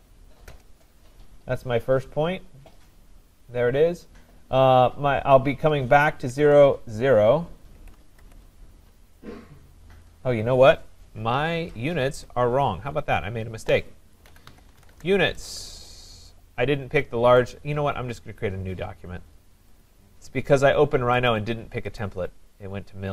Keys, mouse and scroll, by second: 0.5 Return, 2.2-3.1 scroll, 7.5-8.7 typing, 11.5 Escape, 12.1 Escape, 14.0-15.3 typing, 17.1 typing, 17.5 click, 19.8 click, 21.3 click, 22.0 click.